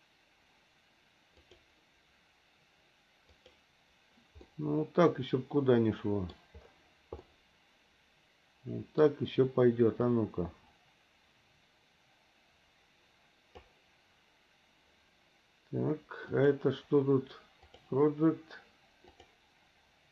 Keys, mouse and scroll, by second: 1.5-3.6 drag, 4.5-6.3 middle drag, 7.2-9.1 middle drag, 10.1-13.6 drag, 16.3-17.8 drag, 19.1-20.1 drag.